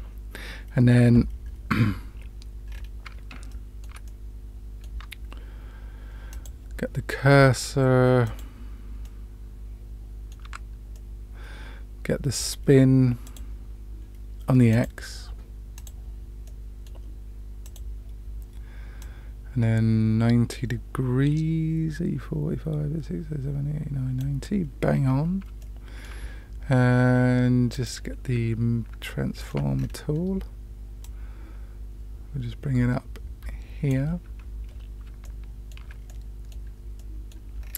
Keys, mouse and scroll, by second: 2.7-3.2 scroll up 2, 3.4-3.9 shift+middle drag, 4.0-4.9 middle drag, 6.3 click, 8.2 click, 9.0-10.4 middle drag, 10.4 Tab, 10.9-12.3 middle drag, 13.2 click, 14.7 click, 15.7 click, 16.4 middle click, 17.6 click, 19.0-24.1 drag, 25.6 shift+middle click, 27.7 click, 29.0 shift+middle click, 29.8-30.7 scroll down 1, 31.0-33.9 drag, 35.2 shift+middle click, 36.0 middle click, 36.9 middle click, 37.6-37.7 scroll up 2.